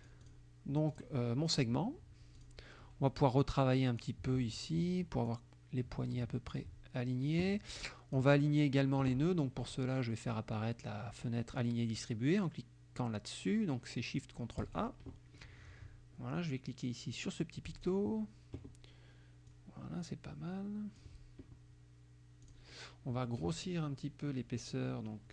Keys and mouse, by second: 0.0 click, 0.9 click, 2.4 click, 3.2 click, 5.3-6.7 drag, 7.8 click, 14.6 click, 17.7 click, 19.5-21.2 drag, 22.5 click.